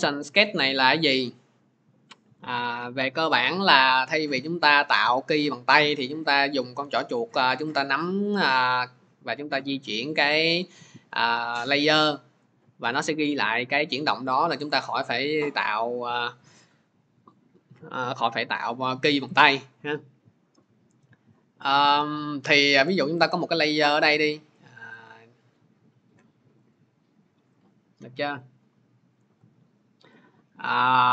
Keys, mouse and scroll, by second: 23.9-25.9 drag.